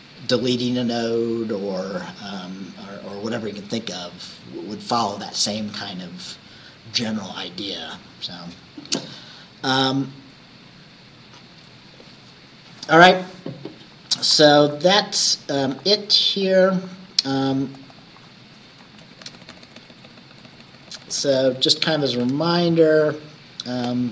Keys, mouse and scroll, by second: 15.8 click, 16.5 click, 17.8 click, 18.1 click, 18.9 Right, 19.1 Left.